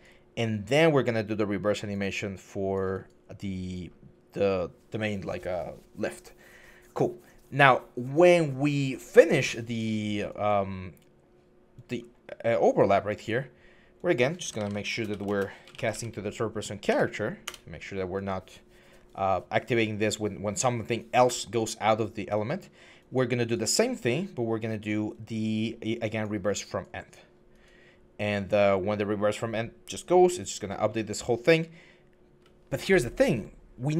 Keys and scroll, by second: 14.1-16.7 typing, 17.2 Return.